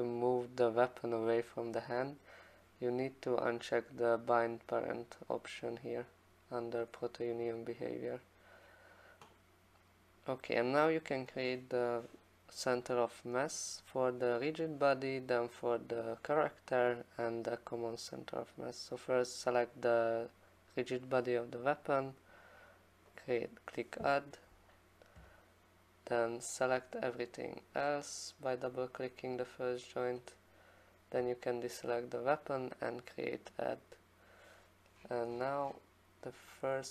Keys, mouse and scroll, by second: 4.8 click, 7.0 middle click, 7.1 middle click, 23.2 click, 26.1 click, 27.4 click, 27.5 click, 33.8-35.3 click, 34.9 middle click, 35.0 middle click, 35.4-36.9 scroll down 18.